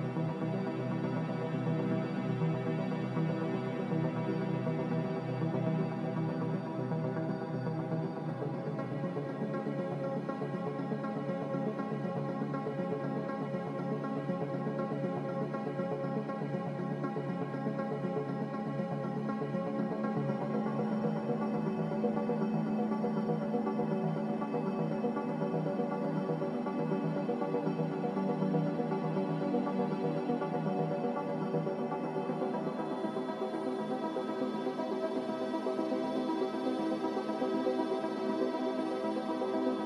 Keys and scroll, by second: 20.1 typing, 20.3 Return, 23.5 typing, 25.0 z, 27.6 z, 29.0 typing, 29.4 Return, 33.1 x, 36.9 typing.